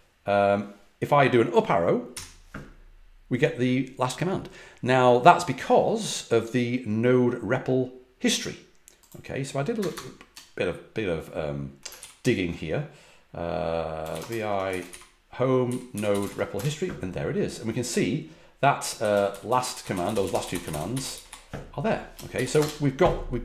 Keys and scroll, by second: 2.1 Up, 9.7 BackSpace, 9.9 BackSpace, 10.1 BackSpace, 11.9 ctrl+d, 13.7-16.6 typing, 18.8-22.5 typing.